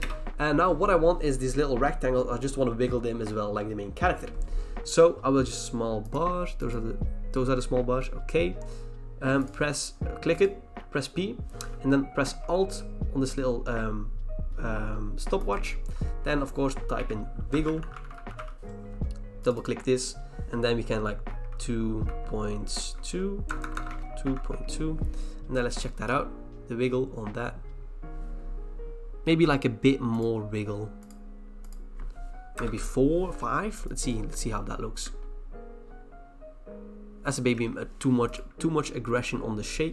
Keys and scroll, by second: 10.7 p, 16.9-18.9 typing, 21.0-25.0 typing, 29.0-30.3 typing, 32.5 BackSpace, 32.7 5, 34.4 Return.